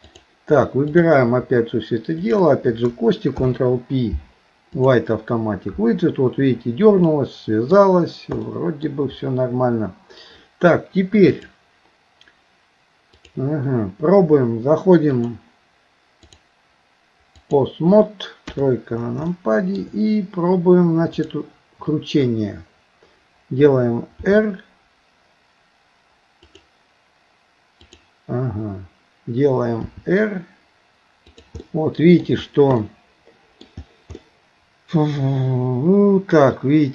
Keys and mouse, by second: 0.9 click, 2.2 shift+click, 3.3 ctrl+p, 7.1 middle click, 8.5 middle click, 11.4 click, 13.2 click, 15.2 click, 16.3-17.6 drag, 18.5 KP_3, 19.3 shift+middle click, 21.1 click, 24.3 r, 27.9 click, 29.9 r, 31.6 middle click, 32.8 middle click, 34.2-36.9 middle drag.